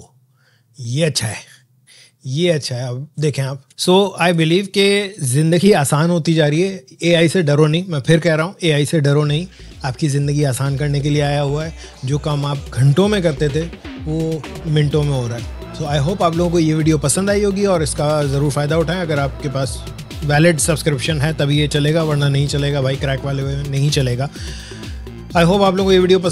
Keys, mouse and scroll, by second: 2.2-2.5 scroll up 2, 3.0 alt+scroll down 1, 3.7 space.